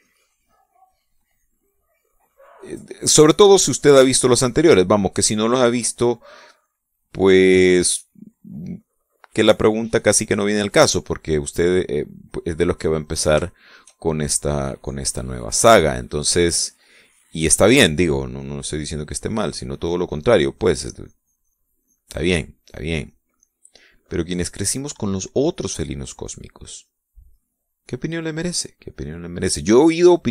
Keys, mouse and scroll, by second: 0.6 ctrl+z, 1.2-2.7 drag, 2.8-4.6 drag, 5.0 shift+middle click, 6.1-11.3 drag, 11.4-14.4 middle drag, 14.4 shift+middle click, 15.4-16.6 drag, 16.6 middle click, 17.7-19.6 drag, 20.1 middle click, 20.6-22.6 drag, 22.8 click, 23.6 click, 24.4 middle click, 27.0-28.1 drag, 28.2-29.5 drag, 29.7 click.